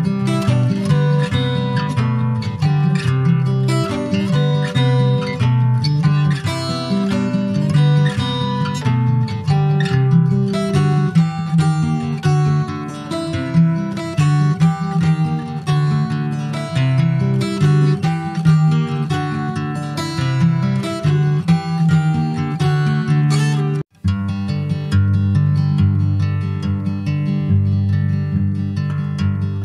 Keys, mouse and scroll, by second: 0.1-0.6 scroll up 3, 0.6 shift+middle click, 1.3 click, 2.4 s, 3.5 alt+middle click, 4.2 s, 6.6 s, 8.8 s, 10.6 s, 13.7 click, 16.4 middle click, 17.0 ctrl+s, 17.2-18.2 middle drag, 18.2 /, 18.6-19.9 middle drag, 19.9 ctrl+s, 20.1 click, 20.6 ctrl+a, 21.5 middle click, 21.9 ctrl+s, 23.6 middle click, 23.8 click, 24.1 Tab, 24.6 middle click, 25.3 Tab, 27.0 /, 27.9 middle click, 28.7 ctrl+s, 28.8 ctrl+click, 29.1 middle click.